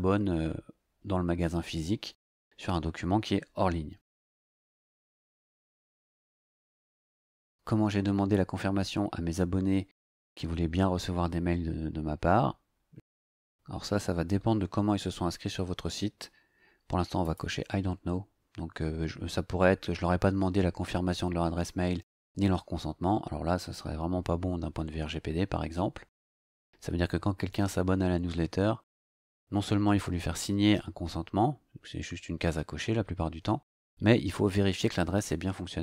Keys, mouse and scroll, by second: 4.7-5.9 scroll down 2, 5.9 scroll down 1, 17.2 click.